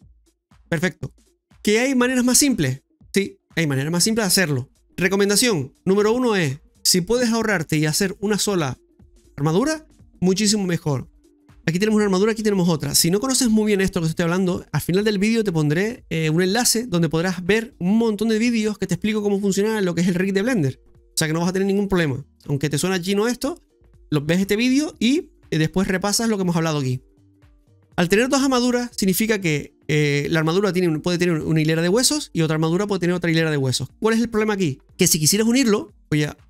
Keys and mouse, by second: 12.1 right click, 12.7 right click, 32.5 right click.